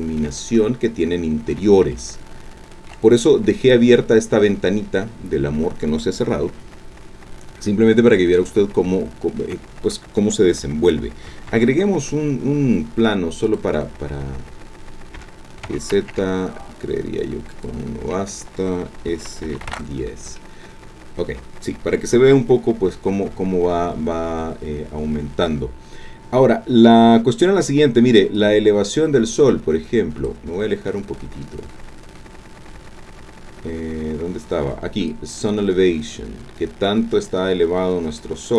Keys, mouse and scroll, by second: 1.9-3.1 shift+drag, 5.1 scroll down 2, 7.2 scroll down 2, 8.0-8.3 scroll down 2, 8.7 shift+middle click, 9.5 shift+scroll up 2, 11.5 shift+a, 13.4 click, 15.2 g, 15.6 z, 17.5 ctrl+click, 19.1 s, 19.5 KP_1, 19.6 KP_0, 19.7 KP_Enter, 28.3-30.4 drag, 31.3-33.3 scroll down 2, 35.1-38.5 drag.